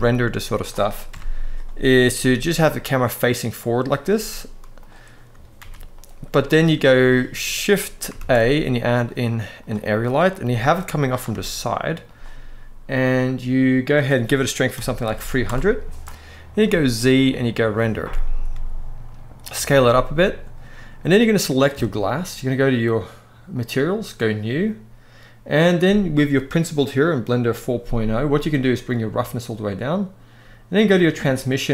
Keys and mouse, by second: 0.3 click, 0.8 KP_0, 1.8 g, 3.8 z, 5.3 ctrl+b, 7.9 shift+a, 10.1 g, 11.0 r, 11.7-13.1 drag, 13.5-15.1 drag, 14.9 0, 16.3 z, 18.2 s, 21.0 click, 23.3 click, 24.0 click, 28.7 click, 30.6 click, 31.4-31.7 drag.